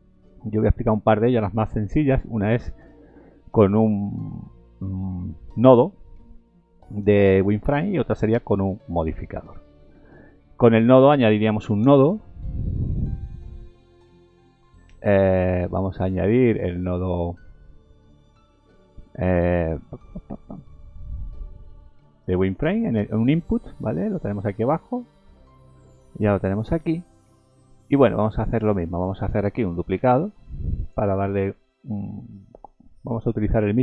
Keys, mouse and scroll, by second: 0.8 scroll up 1, 10.6-10.9 scroll up 2, 11.3 scroll down 1, 11.8 shift+a, 27.5 middle click, 28.9 click, 30.0 shift+d, 31.2-31.6 scroll up 3, 32.1 shift+middle click.